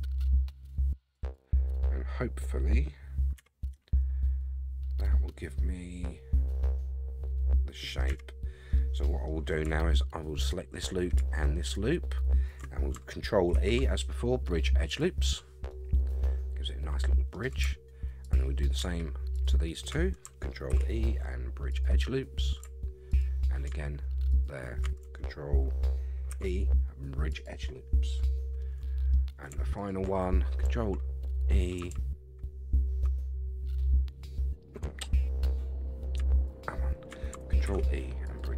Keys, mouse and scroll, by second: 2.6-3.4 scroll down 4, 3.4 Tab, 3.7 scroll down 1, 3.7-8.1 middle drag, 8.1 Tab, 8.5 scroll up 2, 8.8 middle click, 10.4 alt+click, 11.6 alt+shift+click, 13.5 ctrl+e, 15.7-17.3 middle drag, 18.2 alt+click, 19.3 alt+shift+click, 20.7 ctrl+e, 23.1 alt+click, 24.3 alt+shift+click, 26.3 ctrl+e, 28.6 middle click, 29.8 alt+click, 36.5 alt+shift+click, 37.6 ctrl+e.